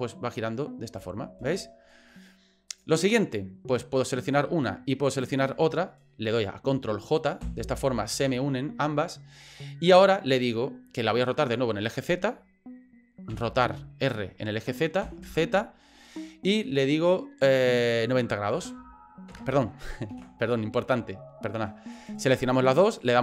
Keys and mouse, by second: 1.4 ctrl+z, 2.7 right click, 4.1 right click, 5.1 shift+right click, 7.4 ctrl+j, 13.3 r, 20.1 ctrl+z, 21.9 right click.